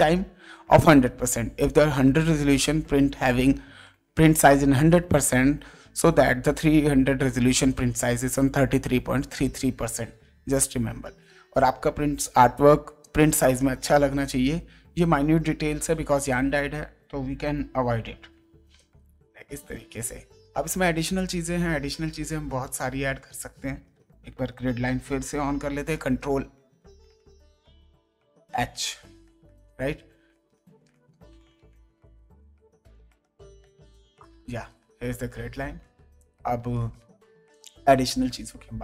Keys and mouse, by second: 18.6 ctrl+;, 21.1 ctrl+space, 21.5 click, 22.5 ctrl+z, 25.9 ctrl+h, 28.9 ctrl+h, 33.9 ctrl+;, 36.2 click, 36.6 ctrl+d.